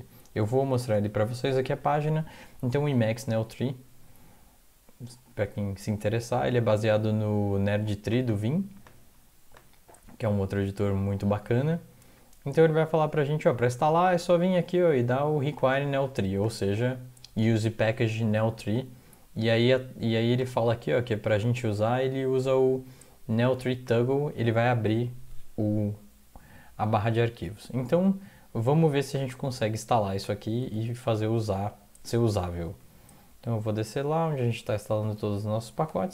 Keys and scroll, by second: 0.7 alt+Tab, 0.9 alt+Tab, 30.7 alt+Tab, 32.7 Down, 33.2 Down, 33.3-34.0 Down, 35.0 Down, 35.0-35.8 Up, 36.0 Up.